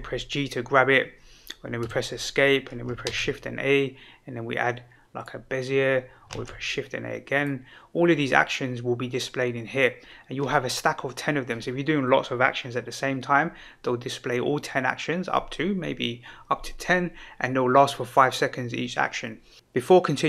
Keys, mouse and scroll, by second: 1.8 Escape, 3.0 shift+a, 6.3 shift+a, 7.3 click.